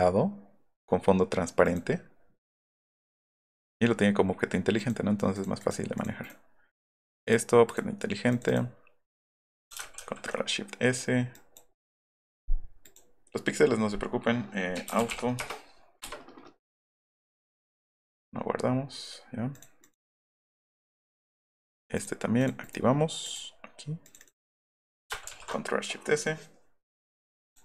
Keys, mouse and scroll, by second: 1.6 click, 3.2 click, 3.5 click, 4.8 click, 5.3 click, 5.6 click, 6.0 click, 6.2 click, 7.7 drag, 11.3 click, 12.8 click, 14.5-15.6 typing, 16.0 Return, 17.3 click, 18.0 click, 19.5 click, 19.8 click, 20.6 click, 21.3 click, 21.9 click, 22.4 click, 25.2 ctrl+alt+shift+s, 27.5 click.